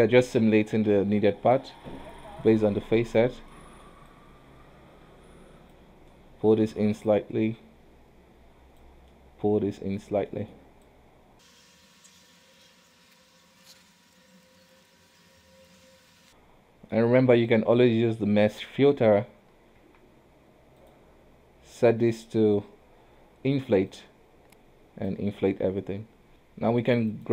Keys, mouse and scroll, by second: 1.1 ctrl+z, 1.7 click, 3.6 middle click, 4.2 click, 6.2-7.2 middle drag, 7.2 click, 9.2-11.0 middle drag, 11.0 click, 11.5 middle click, 11.6 click, 11.9 ctrl+z, 12.0 click, 12.2 shift+middle click, 12.3 scroll up 2, 12.4 click, 12.6 ctrl+z, 12.7 click, 12.9 middle click, 13.1 scroll down 1, 13.2 click, 13.4 click, 13.6 shift+middle click, 13.7 scroll up 1, 13.8 click, 14.1 middle click, 14.3 click, 14.5 middle click, 14.6 shift+middle click, 14.7 click, 15.0 scroll down 3, 15.1 middle click, 15.3 middle click, 15.4 scroll up 2, 15.4 click, 15.7 middle click, 15.7 scroll down 1, 15.8 click, 16.0 middle click, 16.1 click, 16.2-17.4 middle drag, 17.4 space, 19.7 space, 19.9 q, 22.2-25.2 drag, 26.3 q.